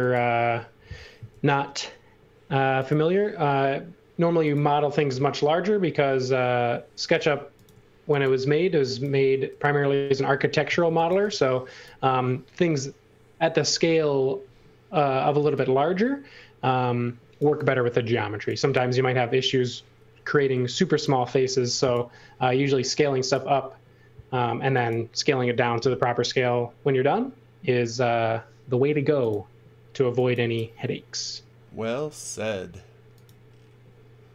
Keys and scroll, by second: 1.2 l, 10.8 x, 11.0 v, 15.3 x, 17.4 v, 20.5 l.